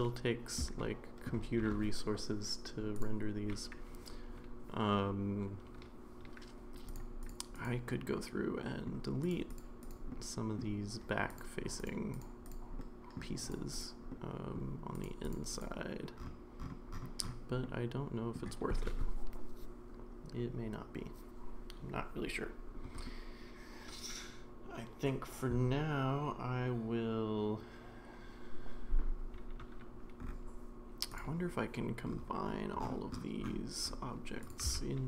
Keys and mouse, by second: 0.8-1.2 shift+middle drag, 3.0 click, 6.9 click, 7.5 click, 8.1-8.8 middle drag, 9.3 click, 9.5 click, 9.8 click, 10.1-10.6 middle drag, 11.3 click, 12.8-13.1 middle drag, 13.5 drag, 14.1-14.6 middle drag, 15.2 click, 15.6 click, 17.6-18.3 middle drag, 34.5 drag, 34.6 a.